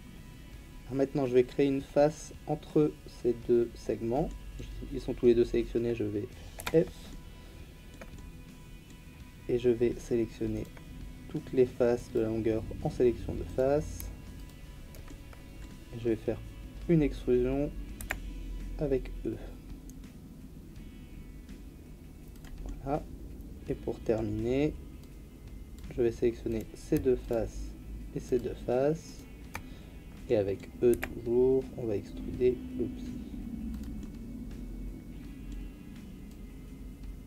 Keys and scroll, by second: 6.6 f, 18.0 e, 30.9 e.